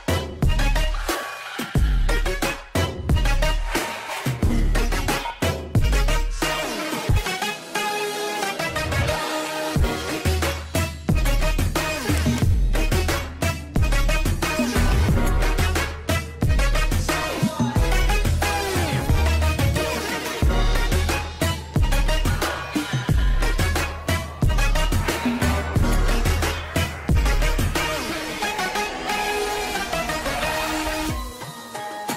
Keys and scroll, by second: 1.3 c, 1.8 shift+F2, 2.5 Escape, 8.2 shift+Page_Down, 13.6 ctrl+Page_Down, 21.3 ctrl+z, 23.0 alt+c, 23.9 F4.